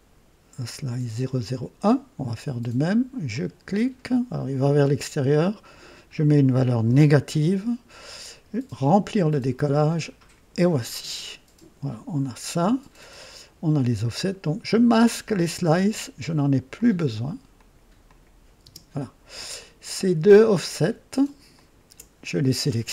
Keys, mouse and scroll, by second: 3.2 click, 5.5 click, 6.8 KP_Subtract, 8.8 click, 10.1 click, 10.9-11.2 scroll down 2, 11.2 typing, 13.1 scroll down 1, 14.9 click, 15.7-16.7 typing, 16.7 click, 17.5 click, 18.0 click, 18.6 typing, 19.5 click, 21.5 ctrl+click.